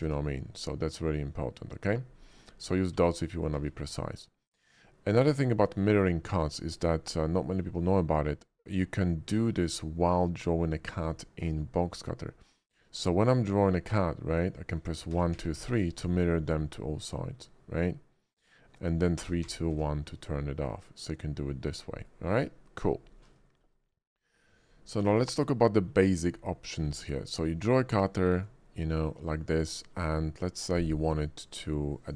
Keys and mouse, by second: 1.8-2.4 drag, 2.8 click, 2.9 x, 3.5 shift+a, 5.6 middle click, 6.8 shift+middle drag, 7.3 middle click, 7.9 shift+middle drag, 9.2 shift+middle drag, 9.7 middle click, 10.6 shift+middle drag, 11.2 middle click, 13.2-13.9 middle drag, 15.1 1, 15.3 2, 15.5 3, 18.7-19.7 typing, 22.0 click, 23.5 shift+middle click, 23.8 middle click, 24.3 shift+middle drag, 25.2 shift+middle click, 25.6 click, 26.5 shift+middle click, 27.5-28.4 drag.